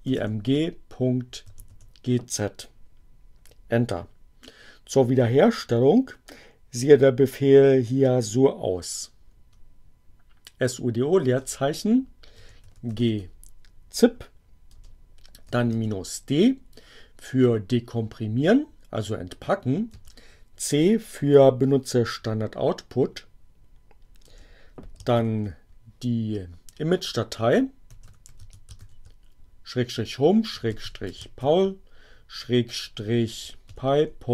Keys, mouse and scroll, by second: 0.0-2.0 typing, 9.3 BackSpace, 12.0-13.3 typing, 14.6-16.0 typing, 19.8 c, 24.1 space, 25.0 shift+7, 27.5-31.7 typing, 33.1-34.3 typing.